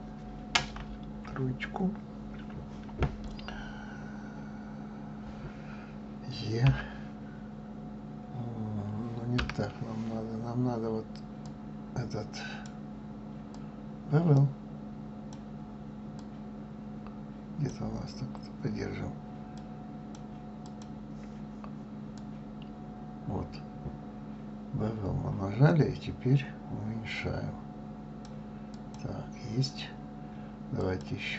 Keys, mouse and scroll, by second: 1.0 KP_3, 6.6 e, 11.4-15.7 drag, 16.1 click, 19.6 click, 22.1 click, 28.7 click, 30.8 click.